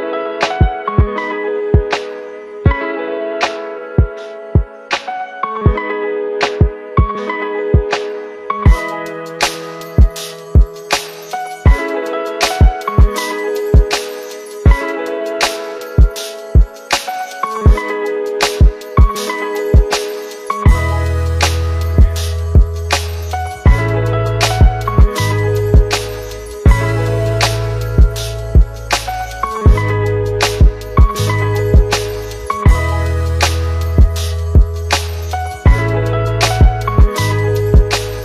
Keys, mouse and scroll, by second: 7.4 click, 9.8 click, 17.5 click, 22.6 click, 25.3-25.7 scroll up 1, 25.7-26.0 middle click, 26.4-26.7 scroll up 1, 26.7-27.0 middle click, 28.2 click, 30.4-31.5 scroll down 1, 32.0 click, 34.2-35.3 click.